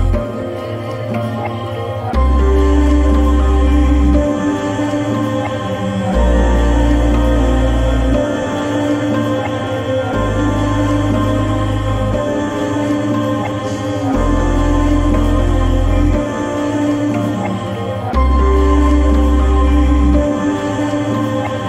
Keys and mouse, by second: 1.1 click, 3.5 middle click, 6.1 click, 10.9 click, 13.9 middle click, 15.7 click.